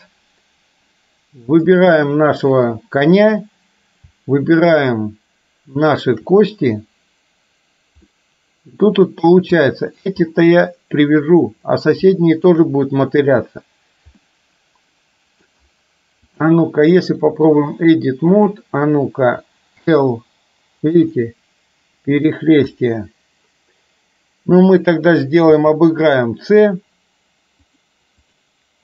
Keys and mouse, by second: 1.7 click, 6.0 shift+click, 8.2-9.3 middle drag, 9.6-10.0 middle drag, 12.1-12.5 shift+middle drag, 14.2-15.6 middle drag, 16.5-17.6 drag, 18.3 click, 19.8 l, 21.2-22.3 middle drag, 22.8 click, 25.5 c.